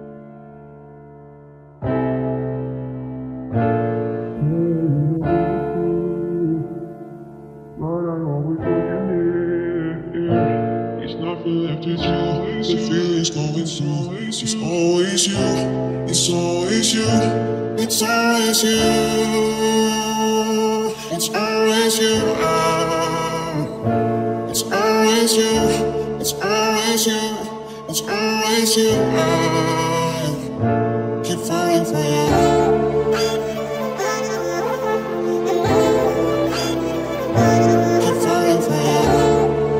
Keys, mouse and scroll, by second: 0.0 middle click, 0.1 e, 1.0 r, 2.2 e, 4.3 r, 5.1-7.8 middle drag, 6.5 e, 8.3 r, 8.9-9.9 middle drag, 12.2 KP_Decimal, 12.9-14.9 middle drag, 13.7 e, 15.3 r, 16.0-17.0 middle drag, 17.2 e, 20.1 e, 21.2 r, 22.7 KP_7, 24.9 Tab, 27.2 z, 28.3 r, 29.3 z, 29.8 r, 31.0 z, 31.5 middle click, 31.7 middle click, 34.8 ctrl+z, 36.4 KP_7, 37.0 z, 37.8 Tab, 38.9 KP_Decimal.